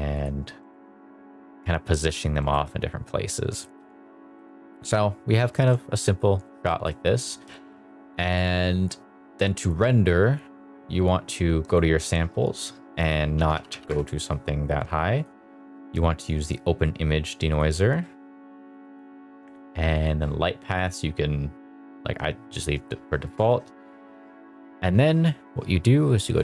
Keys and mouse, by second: 0.1 click, 0.7 shift+middle drag, 2.5 shift+middle drag, 3.5 shift+middle drag, 5.5 shift+middle drag, 6.6 shift+middle drag, 9.6 click, 11.6 click, 12.8-13.9 drag, 13.6 0, 17.5 click, 18.7 click, 19.9 drag, 22.8 click, 23.3 click.